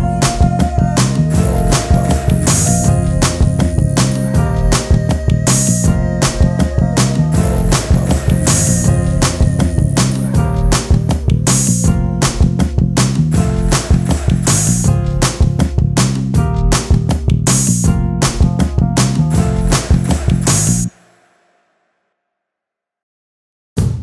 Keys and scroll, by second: 0.9 space, 10.7 space, 21.1 t.